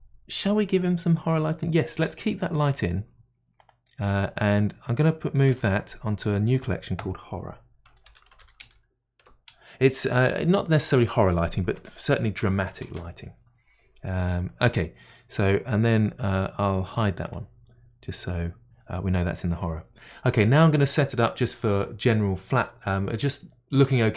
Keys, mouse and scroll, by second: 0.8-2.5 middle drag, 2.5 g, 5.5 m, 8.4 r, 14.5-17.3 middle drag, 17.3-19.1 drag.